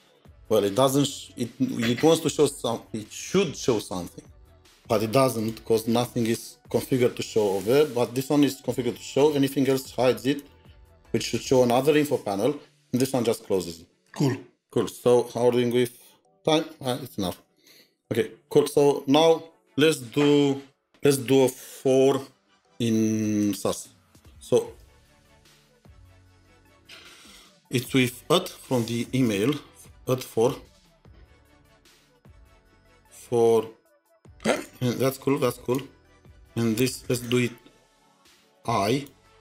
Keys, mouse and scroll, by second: 0.2 scroll up 1, 0.3-2.2 scroll down 1, 10.4 scroll down 1, 10.4 double click, 23.3 double click, 24.8 Return, 25.1 Up, 26.9-27.6 typing, 29.2 typing, 30.8-32.0 typing, 33.0 Tab, 35.3 typing.